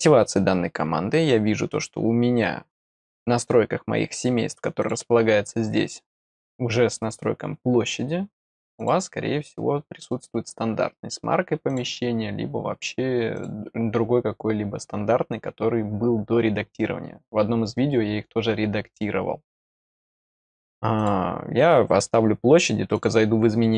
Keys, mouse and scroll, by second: 4.7 click, 6.3 scroll down 1, 8.7 click, 11.6 click, 13.3 click, 19.8 click, 20.9 click, 22.9 click.